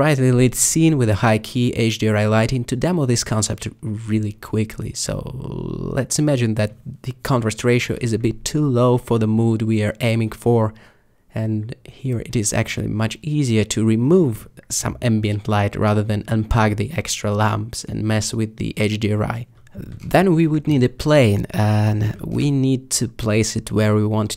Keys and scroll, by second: 6.3 alt+0, 20.8 a, 24.3 alt+r.